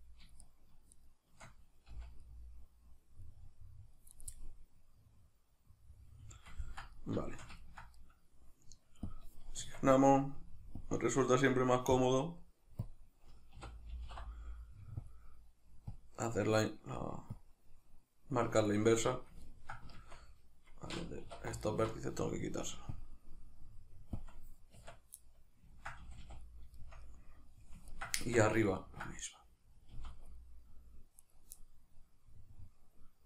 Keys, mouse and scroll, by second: 0.4 shift+right click, 0.9 shift+right click, 2.5 c, 4.2 right click, 4.3-9.1 middle drag, 9.1-18.8 drag, 9.6 Tab, 18.8-21.6 shift+middle drag, 20.0 Tab, 21.3 1, 21.6 alt+right click, 23.0-25.3 drag, 24.8 Tab, 25.3-25.8 middle drag, 26.0 a, 26.4 middle click, 28.2 Tab, 28.4-28.7 middle drag, 30.0 z, 30.4 middle click, 31.2 right click, 31.6 middle click.